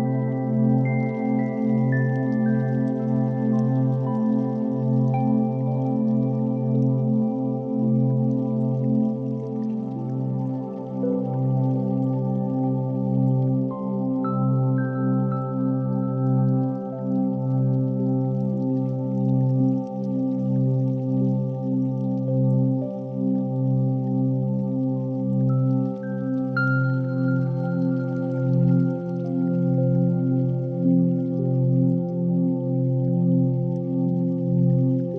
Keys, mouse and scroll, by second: 0.7-1.2 middle drag, 1.2 Tab, 1.2 3, 1.4 click, 2.4 i, 3.9 e, 4.9 shift+d, 5.7 p, 6.5 Tab, 6.8 click, 7.4 Tab, 7.8 a, 8.1 e, 9.4 middle click, 10.3 i, 12.1 g, 14.9 Tab, 16.0 click, 17.9-23.2 drag, 23.2 ctrl+a, 25.9-29.0 shift+drag, 29.8 ctrl+z, 30.0-31.1 right drag, 31.1 click, 31.7 shift+click, 33.2-35.1 drag.